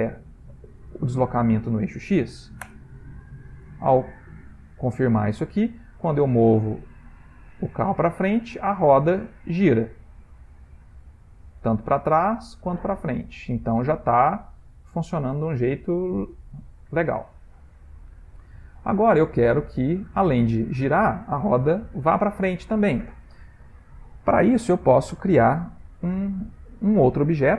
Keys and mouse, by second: 5.0 click, 5.9 click, 18.5 middle click, 19.5 ctrl+middle click.